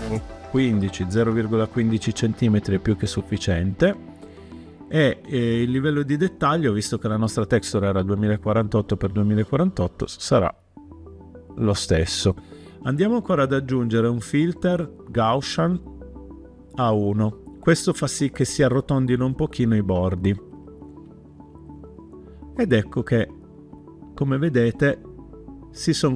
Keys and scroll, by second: 0.2-1.0 typing, 1.1 Return.